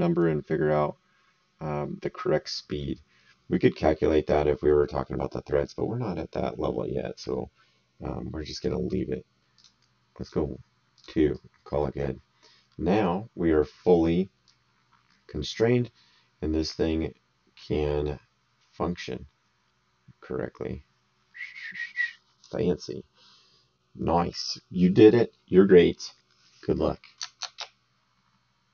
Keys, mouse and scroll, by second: 9.5 click, 11.3 right click, 12.7 middle click, 14.4 click.